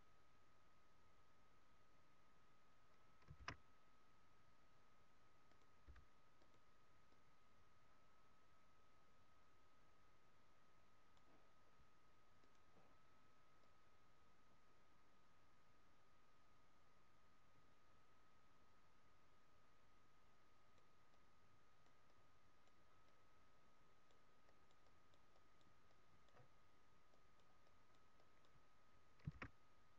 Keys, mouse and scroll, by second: 3.4 shift+f, 5.7 click, 5.8 f, 6.5 click, 12.5 click, 21.0-26.4 click, 26.4 scroll down 1, 27.1 click, 27.8 click, 29.2 shift+f.